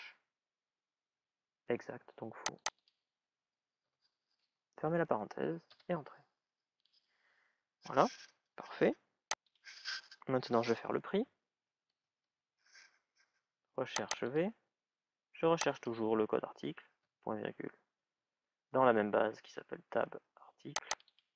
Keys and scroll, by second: 5.5 Return.